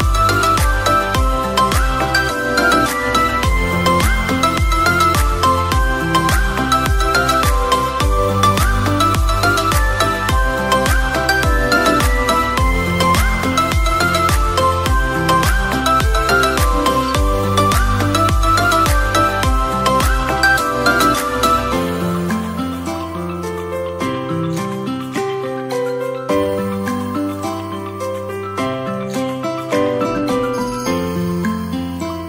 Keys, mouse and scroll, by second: 1.5 click, 3.3-4.3 drag, 6.0 click, 6.9-8.4 drag, 11.0 click, 12.1 click, 14.2 click, 15.4 click, 18.1 click, 18.7 click, 21.1-26.6 drag, 32.0 click.